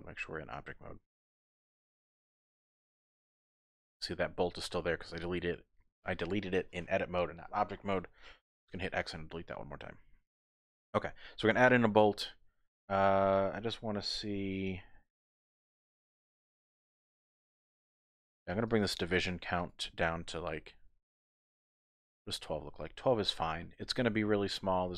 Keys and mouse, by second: 0.2 shift+click, 3.9 click, 8.5 x, 10.2 shift+a, 18.2 click, 18.3 click, 18.5 click, 19.2 click, 19.7-22.6 drag.